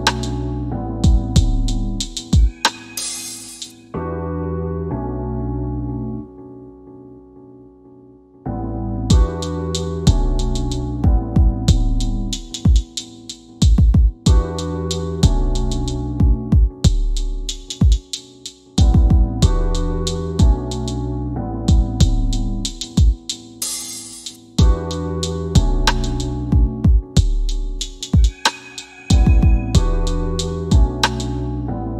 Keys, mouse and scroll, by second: 0.1 alt+w, 1.5 q, 7.5 scroll down 1, 8.3 scroll up 1, 9.3 scroll down 1, 10.3 scroll up 1, 11.0 middle click, 12.4 scroll down 1, 29.6 middle click, 30.6 scroll down 1, 31.2 middle click.